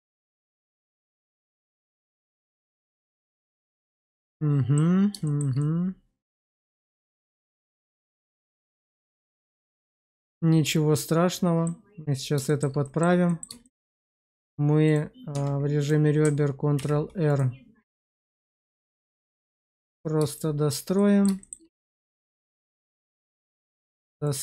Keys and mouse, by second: 0.9 shift+middle click, 2.3-3.4 middle drag, 3.6 shift+middle click, 4.0 middle click, 5.2 shift+middle click, 5.5-7.1 middle drag, 7.3 shift+middle click, 8.0 middle click, 8.5 shift+middle click, 9.0-11.6 middle drag, 12.4 shift+middle click, 12.7 middle click, 13.2 middle click, 13.6 shift+middle click, 14.2 click, 14.8 click, 15.2 Tab, 16.7 ctrl+r, 19.6 click, 20.3 shift+middle click, 20.9 middle click, 21.3 shift+middle click, 21.8 click, 22.9 ctrl+r, 24.2 click.